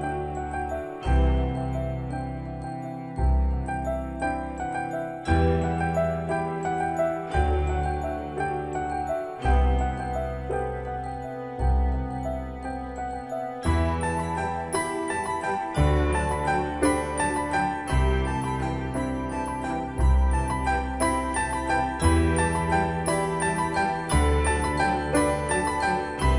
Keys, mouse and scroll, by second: 0.5 scroll up 1, 1.5 scroll down 1, 3.3-16.6 drag, 16.6-17.0 scroll down 1, 17.6-18.2 scroll up 1, 18.2 scroll down 1, 18.9-19.3 scroll up 1, 20.2-20.6 scroll down 1, 22.3-26.3 drag.